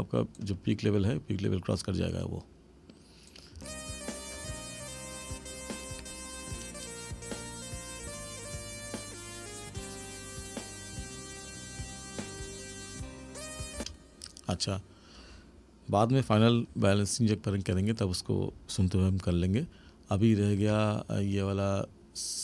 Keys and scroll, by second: 3.5 space, 13.8 space.